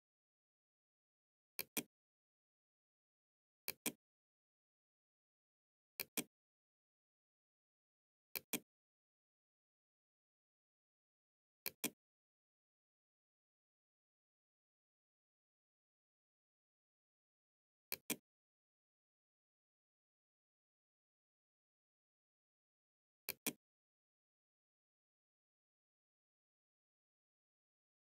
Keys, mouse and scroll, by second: 0.6 click, 2.6 click, 5.0 click, 7.0-8.0 drag, 10.7 click, 13.4 Tab, 16.8 click, 18.6 2, 18.8 x, 19.6 space, 22.3 click, 27.3 click.